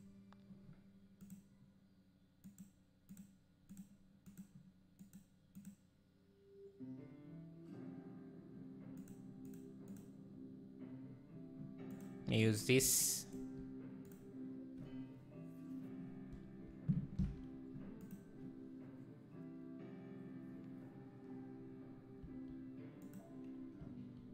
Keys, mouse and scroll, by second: 13.2-14.9 shift+right drag, 14.9-20.5 drag, 22.3 s, 23.9 s.